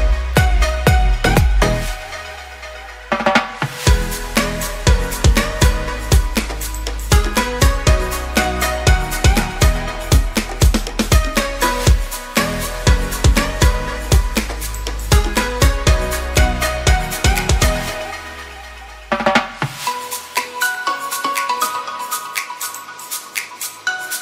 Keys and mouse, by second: 0.0 s, 2.4-3.4 drag, 3.7 b, 4.7 shift+click, 6.5 click, 6.8 s, 8.9 b, 9.5 shift+click, 10.6 s, 12.5 s, 14.0 b, 14.7 shift+click, 15.0 s, 18.2 shift+drag, 18.4 a, 18.8 shift+click, 19.1 b, 19.8 shift+drag, 20.4 e, 21.2-22.3 drag, 22.6 shift+drag, 23.0 a, 23.6 ctrl+r.